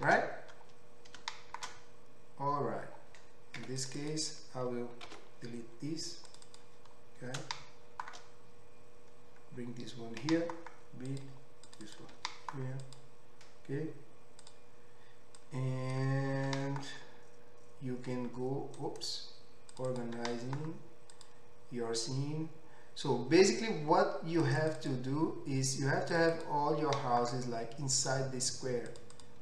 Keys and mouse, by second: 4.0 2, 4.1-6.4 middle drag, 5.1 ctrl+x, 6.4 click, 6.5-14.4 middle drag, 10.2 g, 11.7 click, 11.8 click, 12.2 g, 14.4 click, 14.5-15.5 middle drag, 15.5-19.8 drag, 16.5 g, 19.8 middle click, 20.2 g, 24.6 click, 26.4 click, 26.9 g, 28.9 click, 29.2 click.